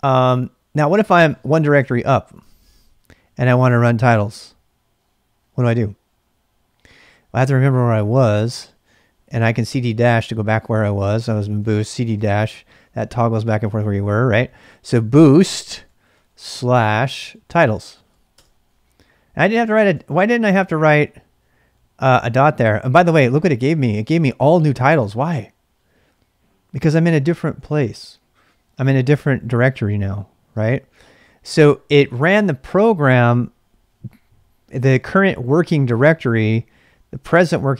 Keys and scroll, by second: 0.8-2.7 typing, 9.0-10.0 typing, 11.3-12.3 typing, 14.4-18.8 typing, 19.7 ctrl+[, 19.9 typing.